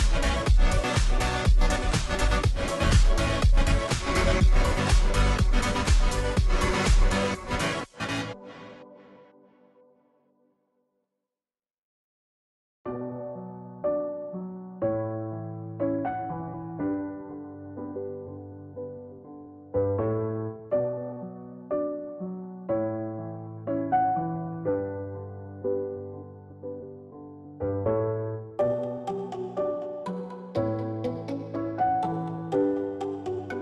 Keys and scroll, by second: 8.4 ctrl+t, 13.2 Return, 18.7 ctrl+t, 29.1-30.4 space, 31.7-33.0 space.